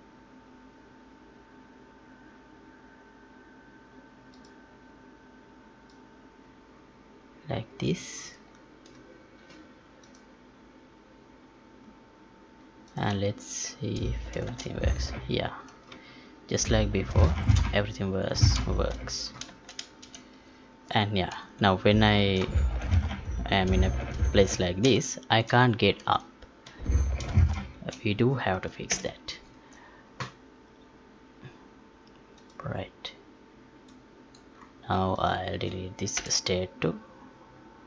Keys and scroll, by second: 14.4 space, 23.8 space, 24.8 space, 28.9 ctrl+p.